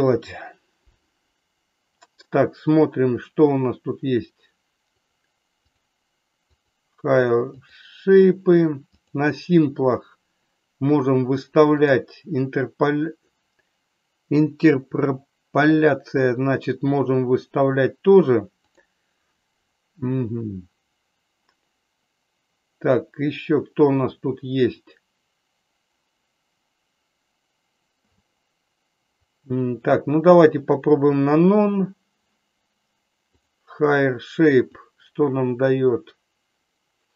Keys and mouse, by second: 5.0 click, 5.6 click, 6.5 click, 7.5 click, 11.7 click, 34.6-37.1 drag.